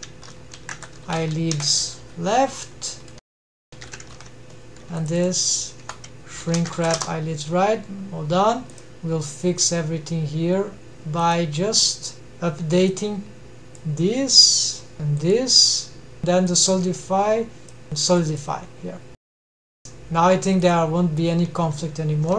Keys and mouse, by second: 1.4 Delete, 1.5 Delete, 1.8 Delete, 5.1-6.5 drag, 8.3-11.1 drag, 12.5-14.4 drag, 14.6-15.5 drag, 17.8 click, 19.6 click, 20.7-21.2 drag.